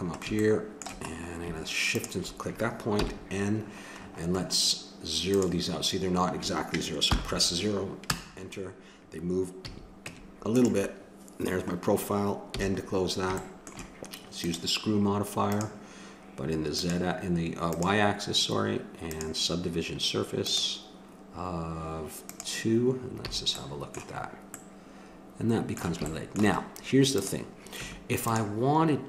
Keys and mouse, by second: 1.9-2.9 drag, 2.9 n, 5.3-6.3 drag, 6.4 n, 9.6 a, 10.1 Tab, 12.6 n, 14.4-15.5 drag, 18.4-24.1 drag, 23.3 a, 24.3 middle click, 27.2-28.9 drag, 27.7 Tab.